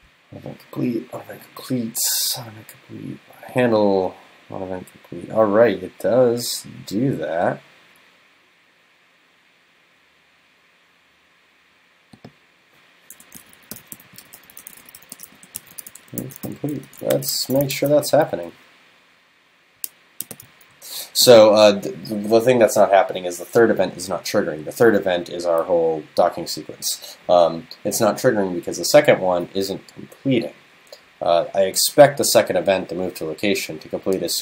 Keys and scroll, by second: 17.4 super+Right, 17.8 super+s.